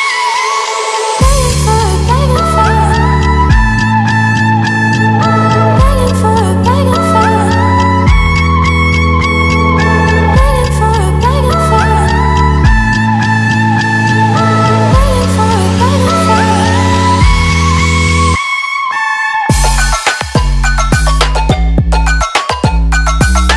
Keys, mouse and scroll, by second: 13.2 right click, 14.7 click.